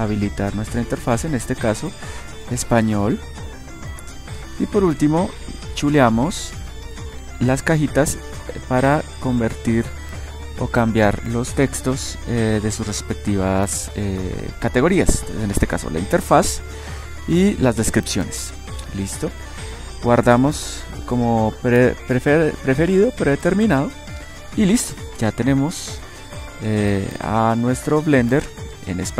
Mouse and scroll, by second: 26.3-29.1 middle drag.